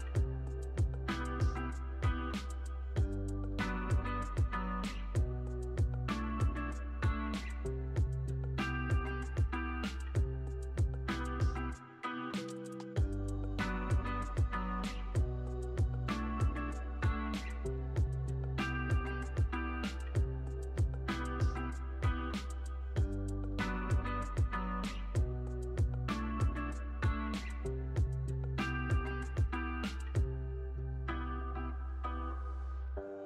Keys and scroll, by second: 11.0 super+z.